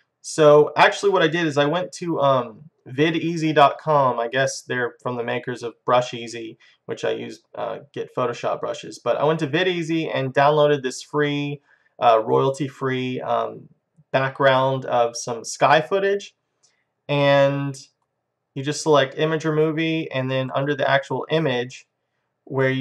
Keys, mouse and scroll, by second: 1.4-3.2 drag, 17.2-19.0 drag, 20.6-22.3 drag.